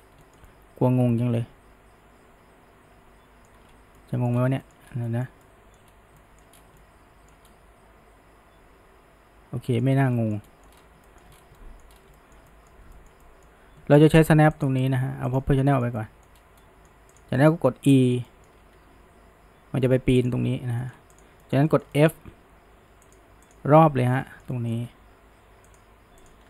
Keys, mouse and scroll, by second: 0.3-3.5 shift+middle drag, 3.7-4.9 typing, 4.0 middle click, 4.7 shift+middle drag, 5.1-5.9 middle drag, 5.9-6.6 typing, 6.2-6.6 middle drag, 6.8-9.9 shift+middle drag, 10.2 shift+middle click, 11.1 shift+middle drag, 11.6 middle click, 12.2-14.6 shift+middle drag, 14.6 click, 15.3 click, 15.7-16.4 shift+middle drag, 16.6-17.2 middle drag, 17.2 click, 17.4-18.8 middle drag, 18.8 e, 20.8-21.2 middle drag, 21.2 click, 21.4-22.4 shift+middle drag, 22.4 f, 23.5 click, 24.2-25.0 shift+middle drag, 25.0 f, 26.3 click.